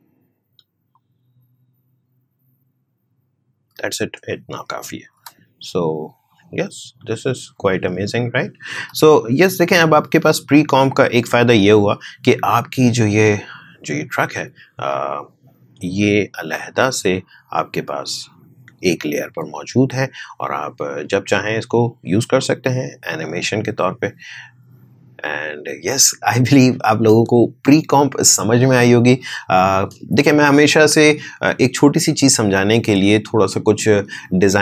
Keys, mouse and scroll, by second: 4.2 click, 5.1 space, 8.7 space, 10.7-12.5 scroll up 1, 12.5 click, 14.9-16.8 drag, 16.8 space, 21.3-23.3 drag, 23.3 space.